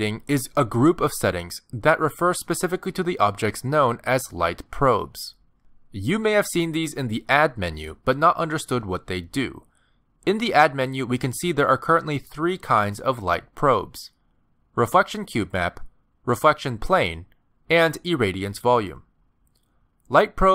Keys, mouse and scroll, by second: 0.2-1.2 scroll down 14, 3.9 click.